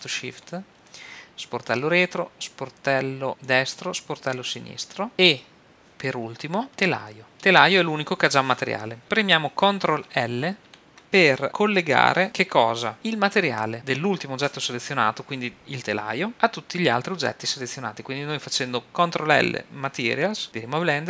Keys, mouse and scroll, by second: 1.7 click, 2.0 right click, 2.1-3.3 drag, 3.4-5.1 drag, 10.6 ctrl+l.